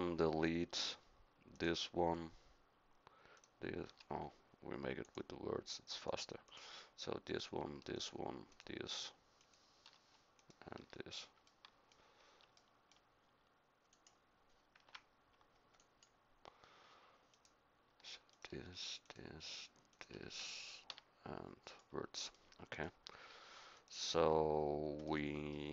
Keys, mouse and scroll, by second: 1.5-7.6 drag, 14.8 Escape, 15.8-17.3 drag, 20.9 x.